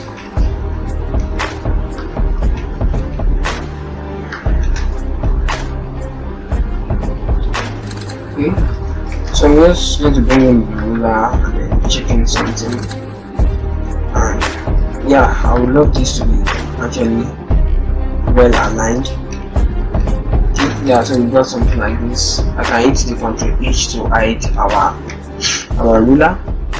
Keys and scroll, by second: 2.3 ctrl+Return, 7.3 ctrl+Return, 9.0 ctrl+r, 15.8 ctrl+Left, 19.9 ctrl+Return, 21.4 ctrl+-, 21.5 ctrl+0, 23.0 h.